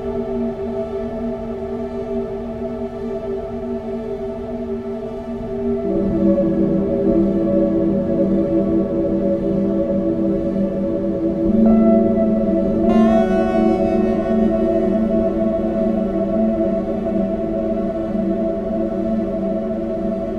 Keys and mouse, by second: 13.3 click, 13.4-14.5 middle drag.